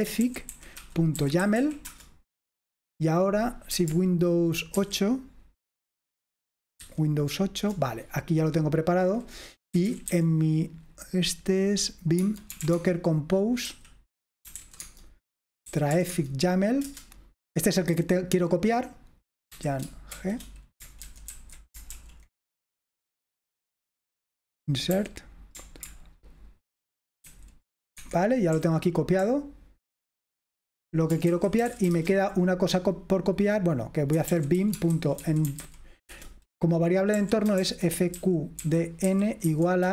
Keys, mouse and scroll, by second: 0.0-2.4 typing, 5.0 super+(, 7.0 super+8, 8.5-10.6 typing, 8.8 click, 12.2-16.2 typing, 16.9 Return, 19.3-20.8 typing, 21.1 ctrl+w, 21.4 ctrl+w, 22.1 super+l, 25.2 i, 27.4 ctrl+alt+v, 28.0 Escape, 28.6-32.4 typing, 33.9-39.5 typing.